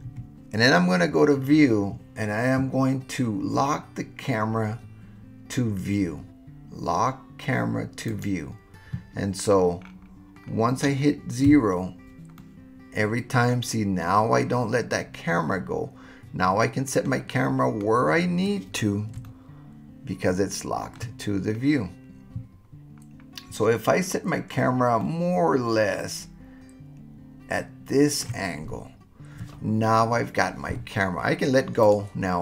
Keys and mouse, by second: 0.0 n, 8.1 click, 11.4 KP_0, 12.4-17.1 middle drag, 19.2-20.9 shift+middle drag, 25.1-28.2 shift+middle drag, 31.8 click.